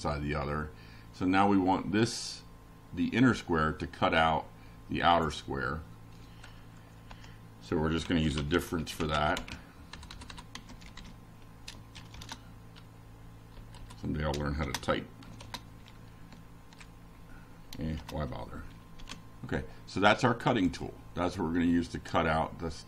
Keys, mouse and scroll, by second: 0.6 shift+Down, 2.4 shift+], 3.3 F5, 4.9-6.4 drag, 8.1 click, 9.5 BackSpace, 11.0 F5, 12.0-15.2 drag, 19.9 click, 20.2 click, 21.2 Left, 22.0 -, 22.4 F5.